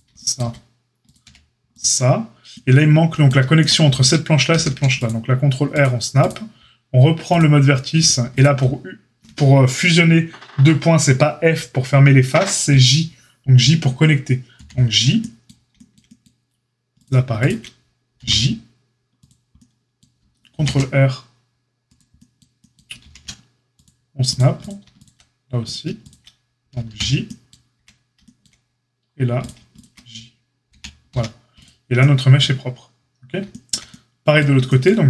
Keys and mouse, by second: 1.0 click, 1.2 x, 4.5 ctrl+r, 7.3-8.0 drag, 8.0-17.0 shift+middle drag, 14.5 j, 17.0 click, 17.1 shift+middle click, 17.3 click, 17.4-22.3 middle drag, 18.1 j, 19.1 click, 20.5 ctrl+super+r, 22.3-24.6 right drag, 22.6 ctrl+middle click, 23.0 ctrl+r, 24.6 click, 24.6-27.7 shift+middle drag, 24.9 click, 25.6 click, 26.0 shift+click, 26.8 j, 27.7-35.0 shift+right drag, 29.3 click, 30.7 j, 31.1 a.